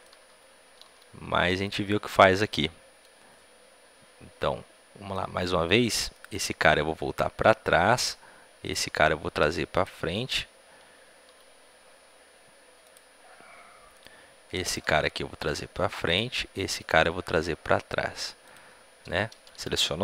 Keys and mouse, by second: 0.8 e, 0.8 r, 1.9-5.0 right drag, 5.0-6.0 middle drag, 6.0-7.8 right drag, 6.2 r, 8.6-11.6 drag, 8.6-11.2 right drag, 8.8 r, 11.2 r, 13.8 click, 13.8-19.2 right drag, 14.8 r, 16.7-17.8 drag, 17.0 r, 19.2-20.0 drag, 19.2 a, 19.4 a.